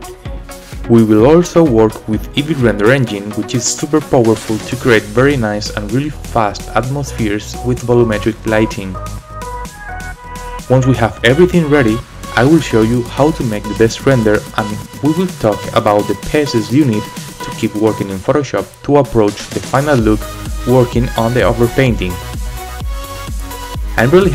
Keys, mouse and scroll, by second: 0.4 click, 2.0 right click, 3.2 space, 3.7-4.2 scroll down 4, 5.0-5.3 scroll up 2, 5.3-6.7 drag, 6.5 scroll up 1, 7.0 click, 7.7 click, 7.9 click, 8.5 click, 8.6 space.